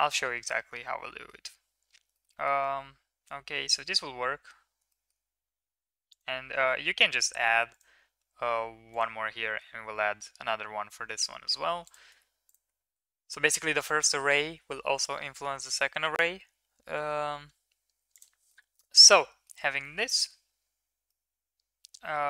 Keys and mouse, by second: 0.0 shift+middle drag, 0.7-1.3 middle drag, 2.1 shift+middle click, 2.3 middle click, 3.2-3.7 middle drag, 4.9 shift+middle drag, 6.1 click, 7.7 drag, 8.9 click, 11.8 click, 12.8 ctrl+s, 13.8 click, 18.1 click, 18.4-19.5 middle drag, 19.8 middle click, 20.1 middle click, 21.0-22.2 middle drag.